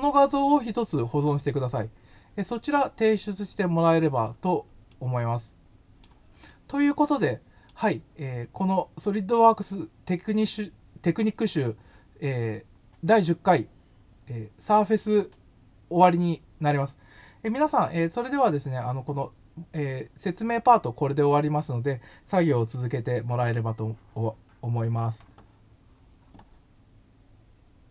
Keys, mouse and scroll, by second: 3.8-4.3 scroll up 2, 4.8-6.0 middle drag, 6.4-7.6 middle drag, 8.1 scroll up 2.